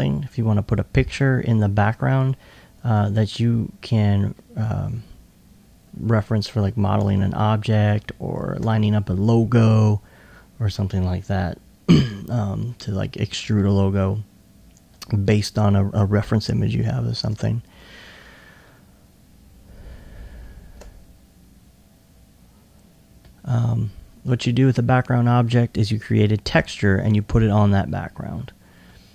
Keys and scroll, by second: 6.1 s, 7.3 alt+2, 8.9 alt+2.